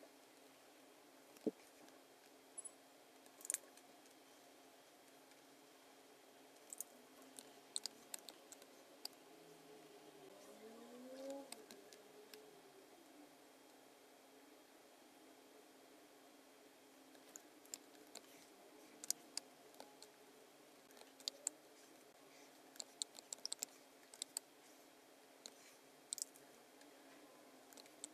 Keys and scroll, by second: 1.4 v, 2.2 v, 7.8 space, 8.6 space, 11.3 space, 11.7 v, 17.8 v, 19.1 space, 21.3 space, 23.4 super+z, 24.2 space.